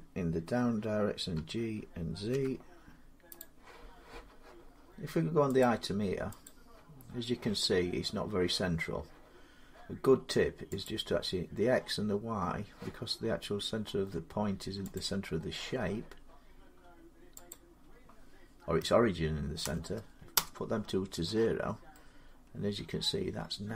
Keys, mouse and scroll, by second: 1.2 g, 2.2 typing, 3.2 click, 5.4 click, 6.3 click, 14.8 click, 17.3 click, 19.5-20.2 typing.